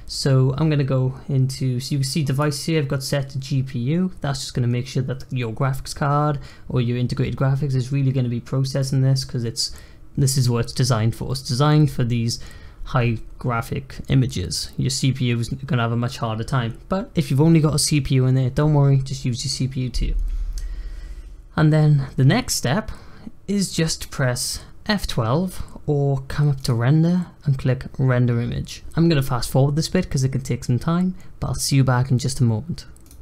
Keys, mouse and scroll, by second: 2.2-5.4 drag, 26.5-29.6 drag.